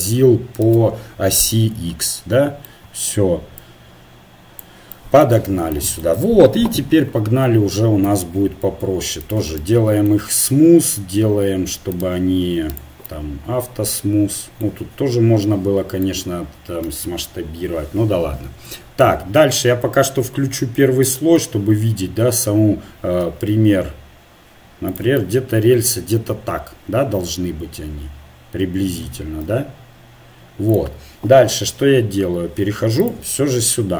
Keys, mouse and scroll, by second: 0.7 ctrl+n, 1.7-3.1 middle drag, 3.6-5.8 drag, 7.1 KP_7, 8.1 Tab, 9.2-11.2 drag, 9.8-11.2 middle drag, 11.9-14.5 drag, 13.2 middle click, 14.5-15.5 middle drag, 18.3 KP_7, 21.0 click, 22.6 middle click, 23.3 s, 25.3 middle click, 29.4 s, 33.0-33.9 drag.